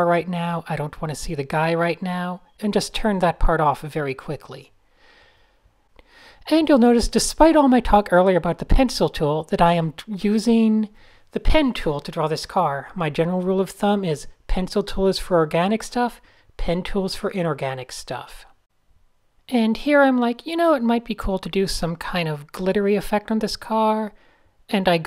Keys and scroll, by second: 1.0 super+z, 1.2 super+z, 3.9 super+z, 4.3 super+h, 6.4 alt+space, 6.5 alt+space, 6.7 alt+space, 8.4 shift+super+a, 8.5 Tab, 8.9-10.1 typing.